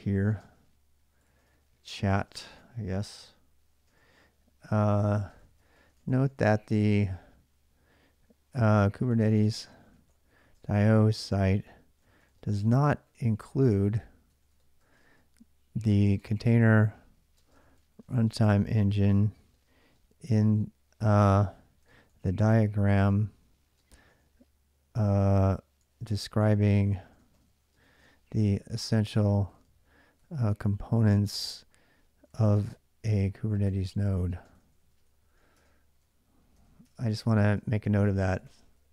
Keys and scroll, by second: 0.0-6.8 typing, 2.4 Return, 8.1-38.9 typing.